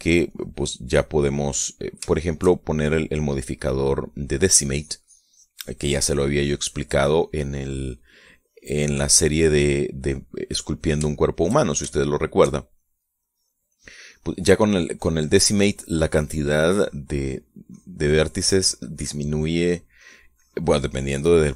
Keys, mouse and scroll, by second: 0.6-2.2 drag, 2.8-4.0 shift+middle drag, 4.1 shift+middle click, 4.8-8.2 drag, 8.2-9.2 middle drag, 9.4-11.0 drag, 11.0 middle click, 11.8 shift+middle click, 12.6-13.6 shift+middle drag, 13.8 shift+click, 14.9-18.7 drag, 19.5 middle click, 20.6-21.5 drag.